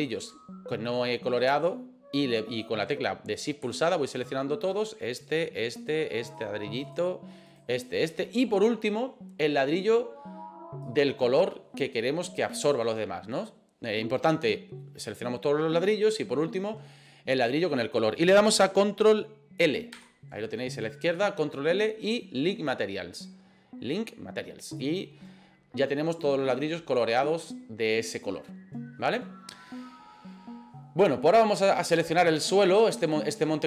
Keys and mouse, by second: 0.0 shift+right click, 4.8 shift+right click, 5.3 shift+right click, 5.8 shift+right click, 6.3 shift+right click, 6.9 shift+right click, 7.5 shift+right click, 8.0 shift+right click, 10.9 shift+right click, 19.9 ctrl+l, 26.2 right click, 31.9 right click.